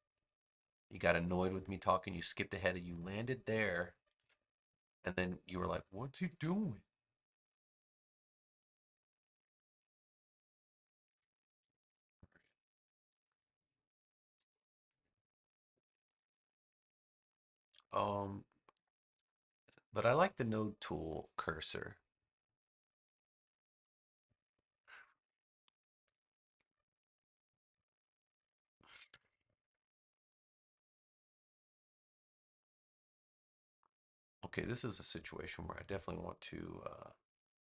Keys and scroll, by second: 4.1 super+z, 6.2 z, 11.0 v, 13.0 super+=, 13.9 space, 16.0 a, 24.6 space, 29.0 BackSpace.